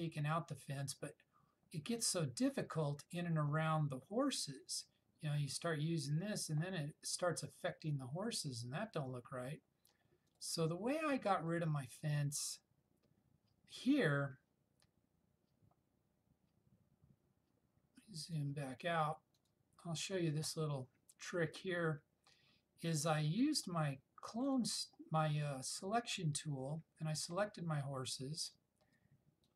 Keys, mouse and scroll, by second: 5.7 click, 5.7-6.9 drag, 18.4 click, 24.6-27.5 drag.